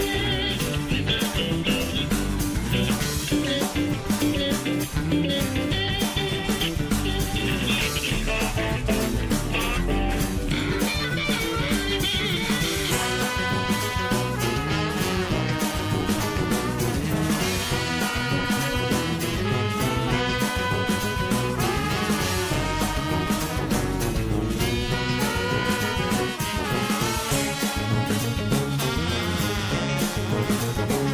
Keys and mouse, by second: 0.6 g, 1.9 middle click, 3.1 shift+middle click, 4.0 shift+middle click, 4.8 click, 6.6 click, 7.9 click, 8.2 shift+middle click, 9.4 click, 10.4 shift+middle click, 12.1 click, 13.4 shift+middle click, 13.9 middle click, 15.7 shift+middle click, 17.8-19.1 drag, 20.7-22.3 drag, 23.3-24.4 drag, 24.6 shift+middle click, 25.8-27.1 drag, 28.4-30.0 drag, 30.6 shift+middle click.